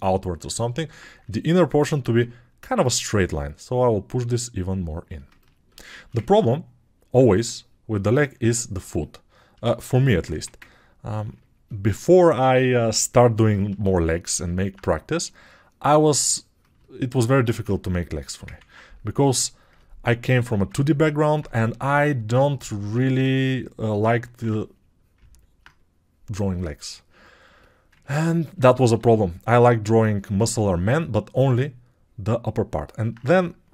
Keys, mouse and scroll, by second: 10.3 1, 12.0 2.